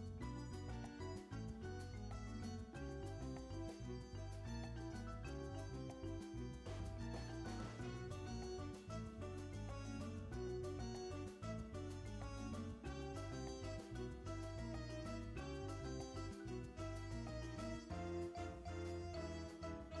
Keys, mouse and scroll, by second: 0.0-6.2 typing, 0.8 click, 1.9 click, 2.5 click, 3.5 click, 3.9 click, 4.3 click, 4.6 click, 5.1 click, 5.3 ctrl+x, 5.5 click, 6.0 click, 6.2 click, 6.7 Tab, 6.8 click, 6.8 Tab, 6.9 Tab, 7.0 click, 7.0 Tab, 7.1 shift+middle click, 7.4 click, 7.5 r, 7.7 click, 7.7 r, 8.1 s, 8.3 shift+click, 8.4 shift+click, 8.5 right click, 8.7 click, 8.9 g, 10.3 shift+click, 10.5-19.3 typing, 11.1 click, 11.1 ctrl+x, 11.3 click, 11.7 click, 12.4 click, 12.7 click, 12.9 click, 13.6 click, 14.5 click, 15.0 shift+middle click, 15.1 Tab, 15.2 click, 15.4 click, 15.8 shift+middle click, 15.9 Tab, 16.3 click, 16.8 shift+click, 17.0 click, 17.5 click, 17.9 click, 18.5 click, 19.2 click, 19.7 Tab, 19.8 scroll down 2.